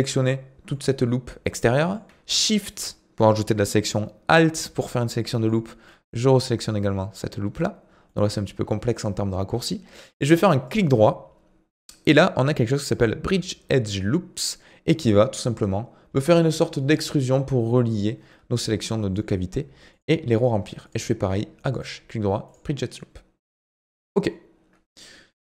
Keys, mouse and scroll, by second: 0.0-4.6 middle drag, 5.4 alt+shift+click, 8.1-10.6 middle drag, 10.6-13.8 right drag, 18.5 scroll down 2, 18.8-19.9 middle drag, 19.9 alt+click, 20.8 alt+shift+click, 21.7-24.9 right drag.